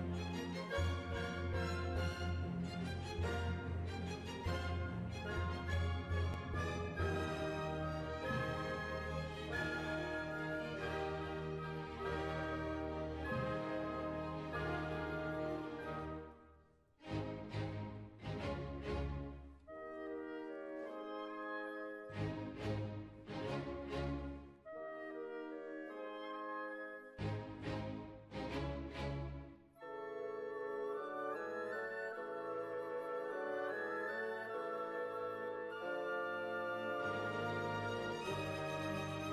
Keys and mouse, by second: 0.4 click, 1.1 middle click, 1.9-2.9 middle drag, 4.9 click, 6.2 b, 6.8 click, 8.6 b, 9.2 click, 10.0 middle click, 10.7 right click, 11.1 b, 11.6 click, 13.7 b, 14.8 click, 16.1 click, 16.1 b, 16.6 click, 18.5 z, 21.1 click, 21.4-23.1 middle drag, 24.5 middle click, 28.9 Tab, 34.1 Tab, 35.7-38.0 drag, 38.7-39.3 right drag.